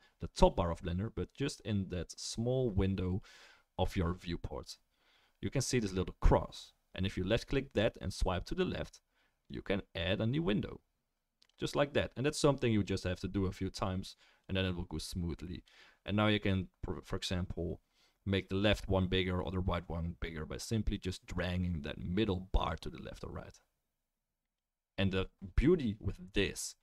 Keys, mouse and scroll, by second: 14.5-25.4 drag, 14.5-24.1 middle drag, 14.5-24.1 right drag.